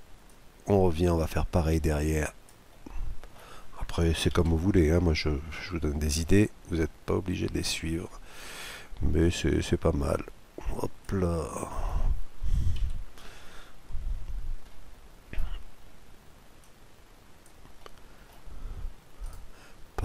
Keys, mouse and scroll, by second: 0.2-2.2 drag, 2.7-4.5 middle drag, 4.4 KP_Decimal, 5.0-5.7 scroll down 1, 5.7-6.2 scroll up 1, 6.2-8.1 middle drag, 9.2-10.9 drag, 11.3-13.2 middle drag, 12.8 KP_Decimal, 13.5-14.3 scroll down 1, 14.3-16.3 middle drag, 16.6-18.4 drag, 17.8-19.5 middle drag, 19.2-20.0 right drag, 19.5-20.0 scroll down 1.